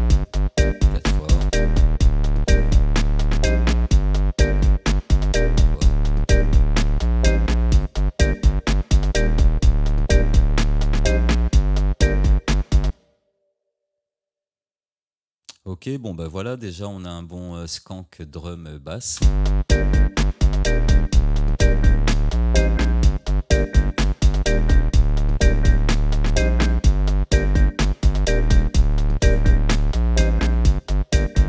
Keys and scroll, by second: 11.5 ctrl+d, 19.2 space, 26.2 Tab.